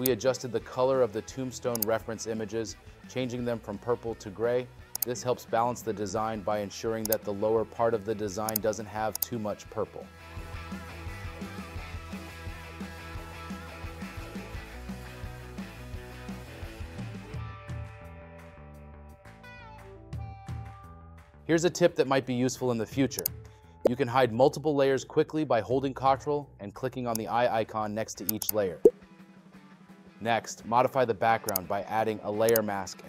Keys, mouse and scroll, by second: 20.3 space.